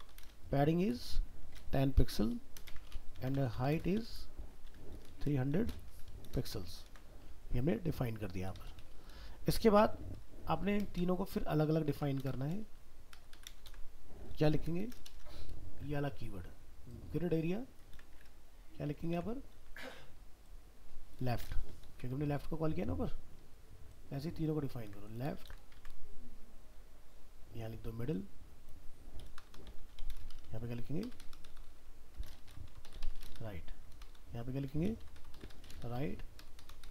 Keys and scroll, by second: 6.9 ctrl+s, 12.2 ctrl+c, 13.7 ctrl+v, 17.9 ctrl+c, 19.1 ctrl+v, 24.9 ctrl+c, 25.5 ctrl+v.